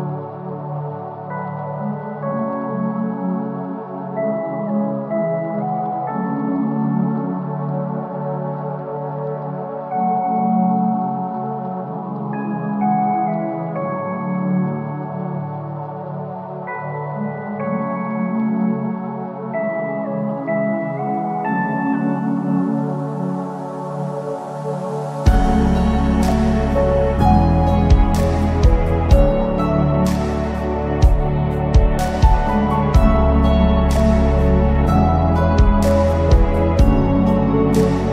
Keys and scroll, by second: 32.6 Delete.